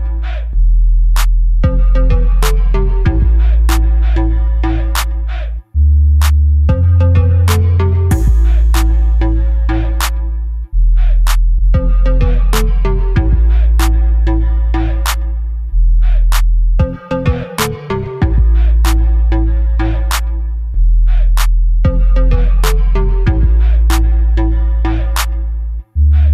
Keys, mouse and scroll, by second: 0.9-2.4 drag, 2.6 KP_0, 8.8-10.4 drag, 10.4 r, 17.7 KP_0, 26.1 click.